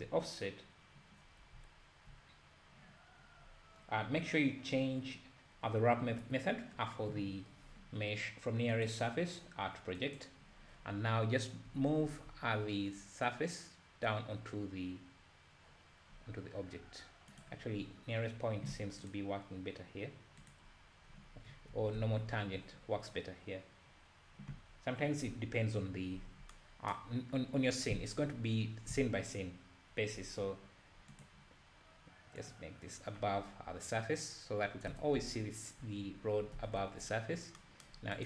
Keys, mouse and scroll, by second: 1.6 `, 10.2-11.7 drag, 11.7 g, 20.6 click, 21.5 `, 22.0 alt+a, 22.3 `, 32.6-35.4 drag, 35.4 `, 36.1-36.6 scroll up 1, 36.6 alt+a, 36.8 `, 36.9-38.2 drag.